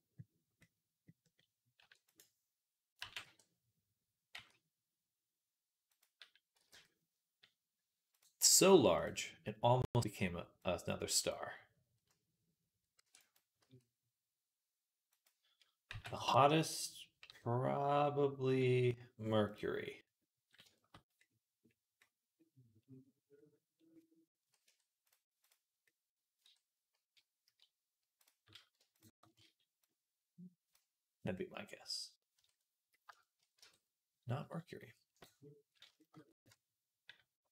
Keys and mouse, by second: 0.6-2.6 middle drag, 1.6 e, 2.8 g, 6.4 x, 12.8-15.7 drag, 12.8 e, 13.5 s, 15.7-21.8 middle drag, 15.7 g, 24.5 Tab, 25.7-28.8 drag, 26.3 Tab, 28.1 middle click, 28.1-32.9 right drag, 29.7-32.9 drag, 29.7-32.9 middle drag, 32.2 Tab, 33.4 Tab, 36.3 Tab.